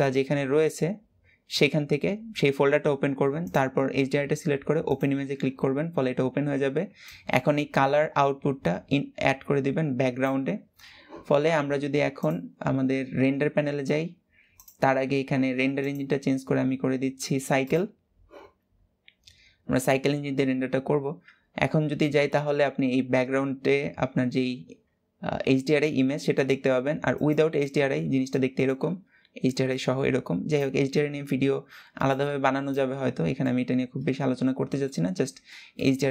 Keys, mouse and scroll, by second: 4.7 click, 9.9-10.7 scroll up 1, 10.7-12.4 scroll up 1, 12.4 click, 17.4-18.5 drag, 19.5-22.6 middle drag, 26.9 click, 27.9-29.4 middle drag, 29.4 drag, 31.7 click, 32.8 scroll down 1, 33.1-36.1 middle drag.